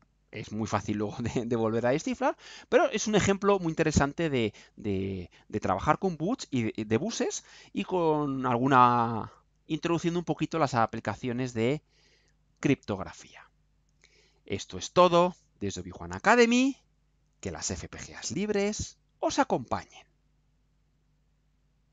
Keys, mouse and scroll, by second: 20.9 click.